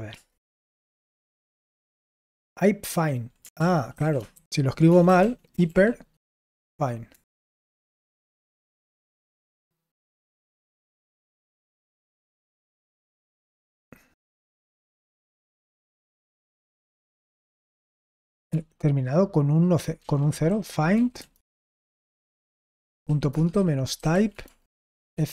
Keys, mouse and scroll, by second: 0.1 typing, 3.5 ctrl+p, 3.9 ctrl+a, 4.3 alt+f, 4.9-5.6 typing, 18.5 ctrl+p, 19.9 ctrl+c, 20.3-25.3 typing.